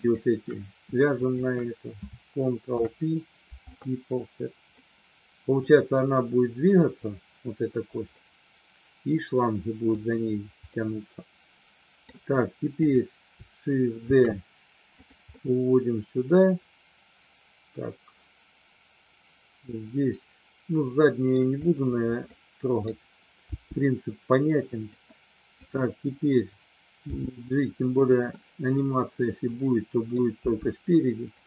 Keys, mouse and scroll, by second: 0.0 shift+click, 1.3 shift+click, 2.6 ctrl+p, 4.7 middle click, 8.1-10.0 middle drag, 10.6-12.0 middle drag, 12.7 click, 14.1 shift+d, 14.9 click, 15.4-21.5 middle drag, 22.5 middle click, 23.5 g, 24.7 click, 25.5 click, 27.1 g, 27.9 click, 28.5-29.9 scroll up 1, 29.9 middle click, 30.4 g, 31.3 click.